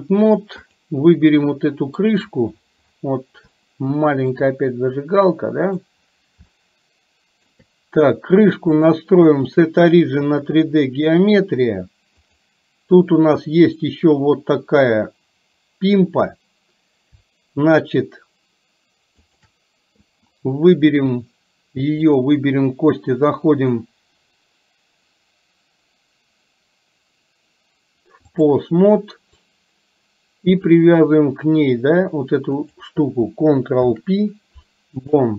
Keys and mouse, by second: 0.8 click, 1.5 middle click, 3.6 shift+middle click, 5.1 middle click, 6.6-7.6 shift+middle drag, 8.8-10.5 drag, 12.3 click, 19.3 shift+click, 22.3-28.6 drag, 32.8 click, 33.9 ctrl+p.